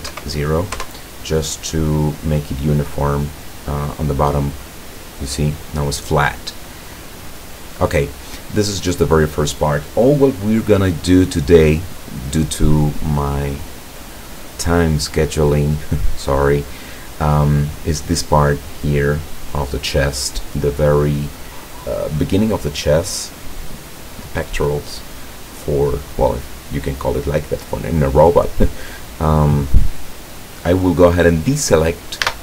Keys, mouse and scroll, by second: 0.2 KP_0, 4.7 right click, 6.1-7.5 right drag, 8.0-9.0 right drag, 9.0-14.2 middle drag, 32.3 a.